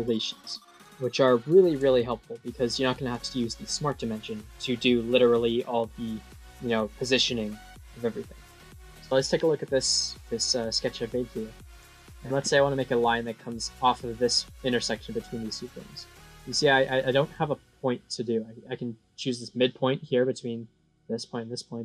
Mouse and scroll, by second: 0.2 middle click, 0.9 middle click, 2.3 middle click, 10.8 middle click, 13.0 click.